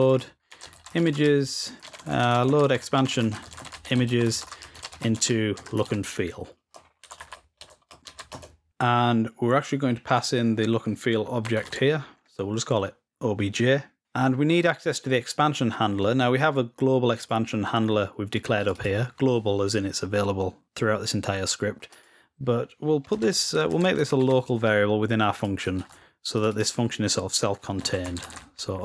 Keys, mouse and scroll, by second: 9.9 click, 17.1 click, 18.4-19.4 drag, 21.7 click, 25.1 click.